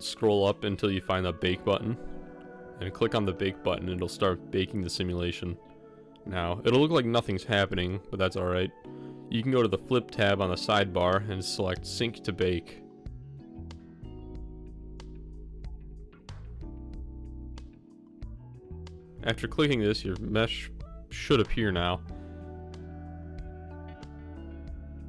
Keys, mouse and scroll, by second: 2.4-2.9 drag, 3.1 middle click, 15.4 click, 18.9 click, 20.4-20.8 drag, 21.8 click, 22.7 middle click, 23.4-23.8 middle drag, 24.4 middle click, 25.0 middle click.